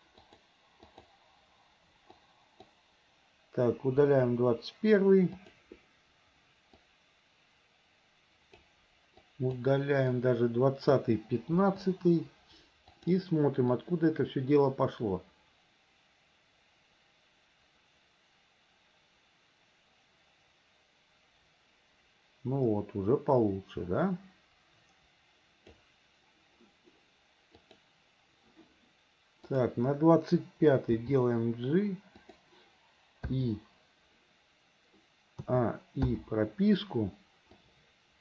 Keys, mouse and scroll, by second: 0.3 click, 0.9 click, 2.3 click, 4.0 Delete, 5.4 click, 6.9-8.7 drag, 9.2-9.6 drag, 10.2-11.0 drag, 11.6 Delete, 13.0 click, 13.8-25.8 drag, 27.7 click, 29.5 click, 31.0 g, 33.3 i, 35.5 a, 36.1 i, 37.6 click.